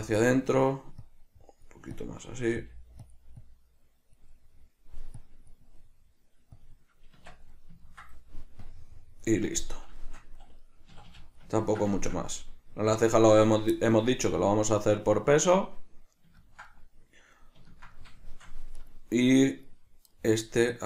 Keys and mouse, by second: 0.0 middle click, 1.1 click, 3.2 click, 4.4 middle click, 5.3 click, 5.9 middle click, 6.7 click, 7.4 Tab, 7.4 drag, 7.7-8.8 middle drag, 8.8 click, 9.7-18.9 middle drag, 11.0 a, 18.9 right click, 19.7 right click, 20.3-20.8 middle drag.